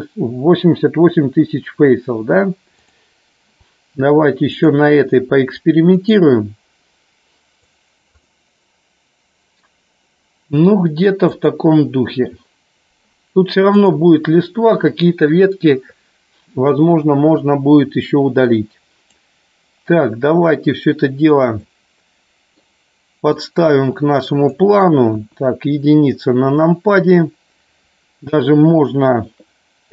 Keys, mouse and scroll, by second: 2.7 click, 4.4-6.1 drag, 7.5 click, 11.2 click, 13.8 click, 18.4 click, 21.5-22.5 middle drag, 23.4 click, 25.1 KP_1.